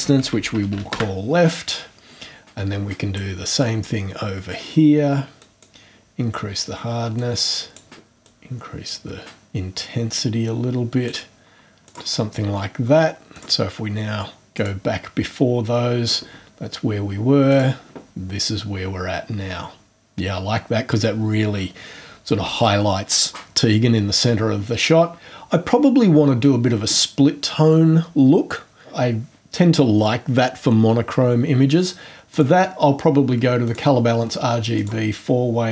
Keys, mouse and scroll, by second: 0.0-1.2 typing, 3.1 right click, 5.4 click, 7.1 click, 8.2 click, 11.8 click, 13.3 click, 14.5 click, 17.5 click, 32.3 click, 33.6 click, 34.7 click.